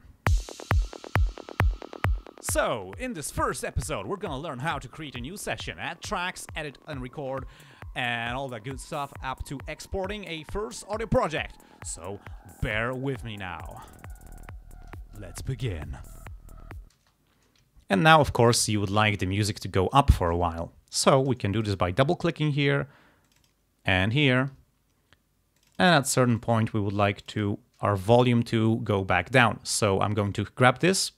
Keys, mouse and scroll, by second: 3.9 ctrl+scroll down 2, 13.4 ctrl+scroll up 2, 17.0 space, 17.7 ctrl+scroll down 2, 20.6 ctrl+scroll up 2, 21.6 click, 23.3 click, 24.1-24.4 ctrl+scroll down 2, 25.6 click, 26.3 click, 27.3 click, 30.3-31.1 drag.